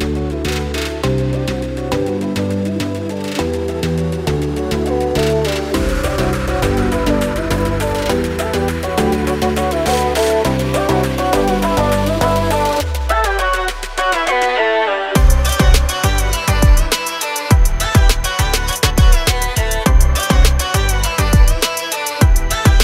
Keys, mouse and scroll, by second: 0.6 double click, 1.2 scroll down 1, 1.5 scroll up 1, 2.0 click, 3.1 F4, 7.1 click, 9.8 click, 10.7 scroll down 1, 11.7 scroll down 1, 13.9 scroll down 1, 15.1 scroll down 1, 16.1 scroll down 1, 17.4 scroll down 1, 19.9 click, 20.9 click.